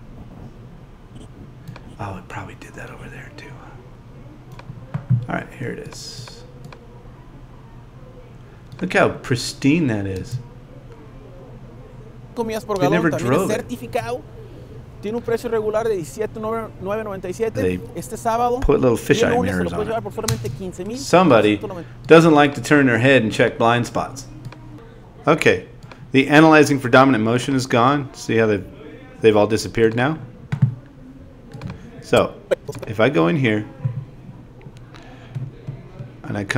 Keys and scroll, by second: 10.1 space, 20.3 space.